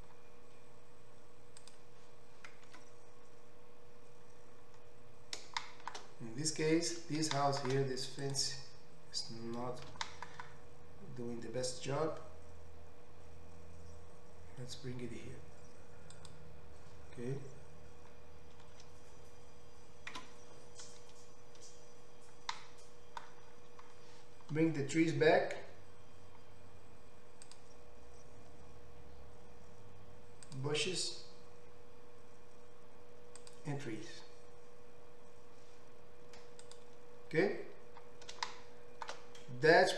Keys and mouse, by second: 1.8-7.4 middle drag, 4.5 Tab, 9.9 g, 22.0 Tab, 23.1-29.9 middle drag, 29.9-36.9 drag, 36.9-39.9 middle drag.